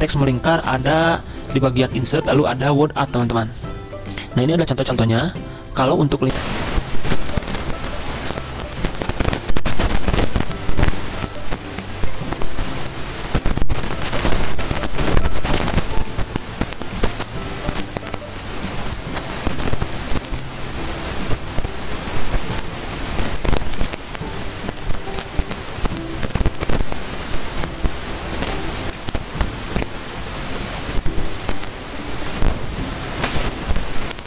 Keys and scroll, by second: 6.3 alt+Tab, 23.9 ctrl+a, 25.4-27.9 typing, 28.1 ctrl+a.